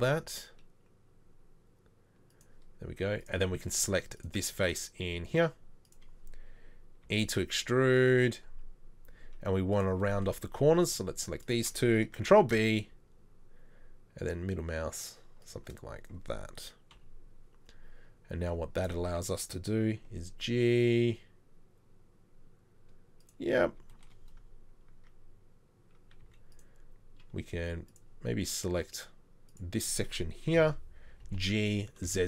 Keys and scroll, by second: 4.0 z, 5.3 z, 7.1 e, 12.3 ctrl+b, 17.0 KP_3, 18.5 Tab, 20.1 Tab, 24.9 Tab, 26.2 Tab, 26.3 z, 30.6 ctrl+l, 31.2 ctrl+l.